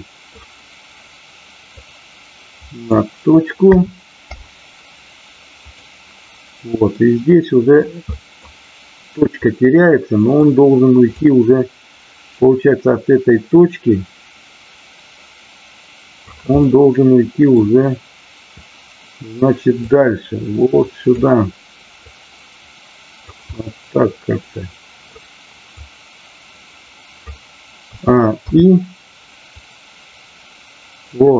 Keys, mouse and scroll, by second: 1.8-3.0 drag, 5.6 click, 6.9-7.8 middle drag, 8.0 middle drag, 9.4-10.3 middle drag, 11.2-16.3 drag, 16.6-17.6 middle drag, 19.8-21.1 drag, 22.0-23.3 drag, 23.4 scroll up 1, 23.6-25.2 middle drag, 25.7-27.3 drag, 29.4-31.3 drag.